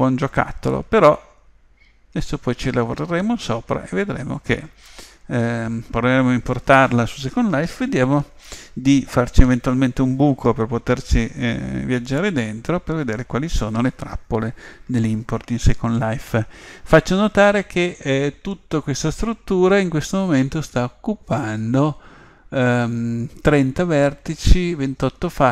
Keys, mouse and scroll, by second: 0.7-2.9 middle drag, 6.2-8.1 middle drag, 19.6 Tab.